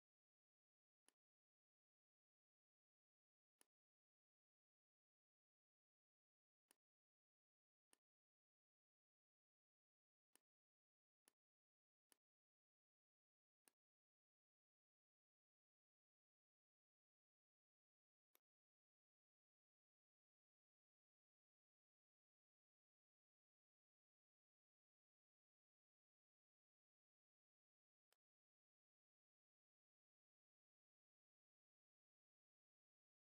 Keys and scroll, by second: 13.4 space, 15.1 l, 19.3 KP_3, 20.2 Tab, 20.6 KP_3, 20.6 KP_0, 23.0 Return, 25.6 m.